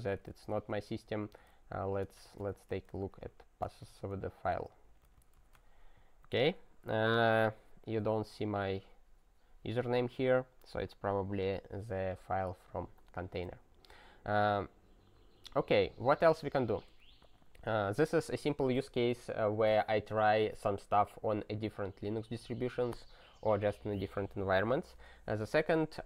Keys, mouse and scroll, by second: 0.0-5.9 typing, 17.2-18.6 scroll.